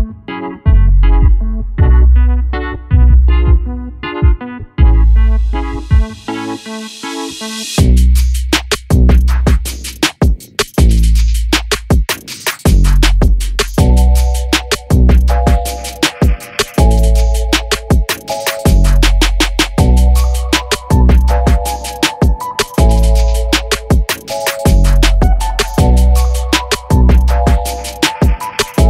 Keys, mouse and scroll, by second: 0.6 n, 0.8 ctrl+KP_Subtract, 1.0 ctrl+KP_Add, 1.3 ctrl+KP_Add, 1.9 ctrl+KP_Add, 2.2 scroll down 1, 2.3-3.5 middle drag, 3.5 shift+d, 5.2 p, 5.9 scroll up 2, 6.1 middle click, 6.3 scroll down 2, 6.4 Tab, 6.6 alt+a, 6.8 click, 7.5 Tab, 8.0 s, 8.4 a, 8.7 s, 10.1 Tab, 10.3 alt+a, 10.4 scroll down 1, 10.6 middle click, 10.7 scroll up 1, 10.9 middle drag, 11.1 drag, 11.4 shift+middle click, 11.5 scroll up 1, 11.7-12.2 middle drag, 12.2-12.8 scroll down 2, 12.8 KP_0, 13.2 scroll up 1, 13.4-14.3 shift+middle drag, 14.3-14.6 scroll down 1, 14.6-15.8 middle drag, 15.8-16.1 scroll up 6, 16.1 shift+middle click, 17.0 scroll up 1, 17.1-18.9 shift+middle drag, 19.2 KP_0, 19.7-20.6 middle drag, 20.6-20.9 scroll up 6, 21.0-24.0 middle drag, 25.0 scroll down 1, 25.2 scroll up 1, 25.4 click, 26.0 Tab, 26.6 u, 27.8 Tab, 28.2-28.6 scroll down 10, 28.6 shift+middle click.